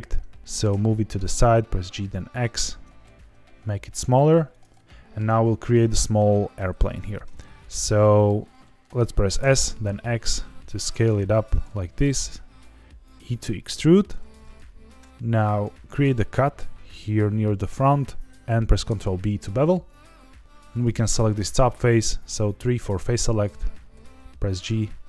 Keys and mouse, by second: 0.4 g, 0.7 x, 2.4 click, 2.7 Tab, 3.0 s, 4.5 click, 4.8 shift+middle click, 6.4 g, 7.0 Escape, 7.9 middle click, 8.6 shift+middle click, 9.1 s, 9.3 x, 11.5 click, 11.8 e, 13.9 click, 15.1 ctrl+r, 17.4 click, 18.8 ctrl+b, 20.4 3, 23.9 g, 24.1 z.